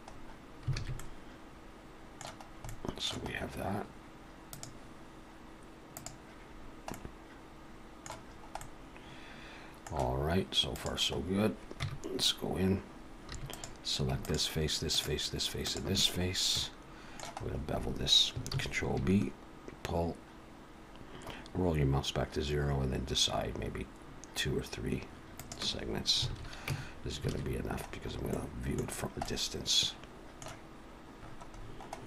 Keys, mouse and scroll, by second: 0.1-0.5 scroll up 2, 0.8 alt+a, 1.0 middle click, 2.6-3.2 scroll up 1, 3.2 middle click, 3.2-4.0 scroll up 2, 4.5 click, 6.6-7.4 scroll down 3, 6.9 middle click, 8.3 scroll up 2, 8.6 middle click, 10.7 click, 11.2-11.6 scroll down 4, 11.8 Tab, 13.3 3, 13.5 click, 14.2 shift+click, 14.9 click, 15.5 click, 16.3 scroll up 2, 16.5 middle click, 17.4 scroll up 2, 18.5 ctrl+b, 26.3 alt+a, 26.7 Tab, 27.3 alt+a, 27.5-28.9 scroll down 6, 28.3 middle click, 28.9-30.9 scroll down 2, 29.2 middle click, 31.2-32.0 scroll down 17.